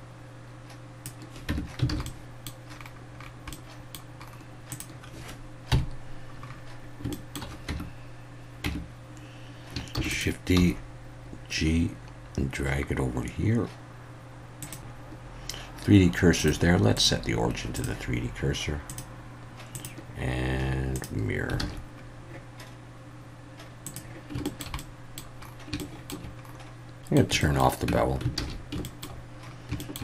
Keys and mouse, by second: 1.5 Tab, 1.9 alt+a, 2.0-2.4 middle drag, 3.5-3.9 middle drag, 4.7 drag, 5.7 KP_1, 7.1 shift+middle drag, 7.7 Tab, 8.6 Tab, 10.0 shift+d, 10.1 click, 10.6 g, 14.6 click, 16.4-17.8 drag, 19.8-21.0 drag, 21.6 alt+a, 23.8 click, 24.4 shift+middle click, 24.8-25.2 middle drag, 25.8 shift+middle drag, 27.0 alt+a, 27.0 middle click, 27.4 shift+middle click, 27.9 Tab, 28.4 alt+a, 28.8 shift+middle drag, 29.8 shift+middle drag.